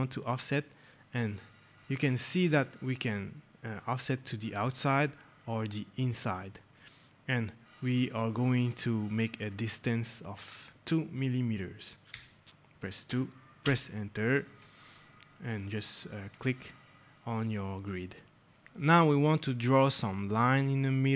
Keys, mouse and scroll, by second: 0.6 scroll, 2.8 scroll, 9.4 click, 12.0 scroll down 2, 13.5 Return, 16.2 click, 17.4 right click, 18.2 scroll.